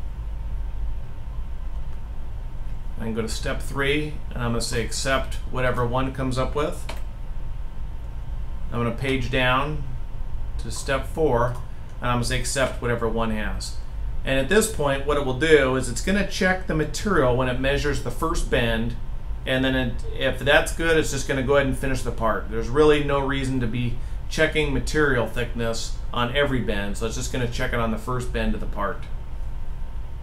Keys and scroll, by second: 1.4-4.0 scroll down 1, 6.5 1, 8.8-11.2 scroll down 1, 12.4 1.